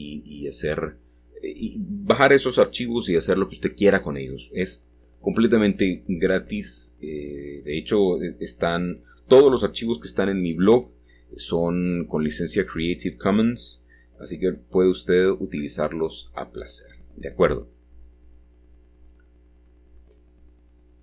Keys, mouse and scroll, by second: 1.7 g, 4.6-7.5 drag, 8.2-10.5 drag, 10.6 x, 12.7-15.4 shift+drag, 15.8 s, 16.9 shift+click, 19.7-20.7 scroll down 1, 20.7 click.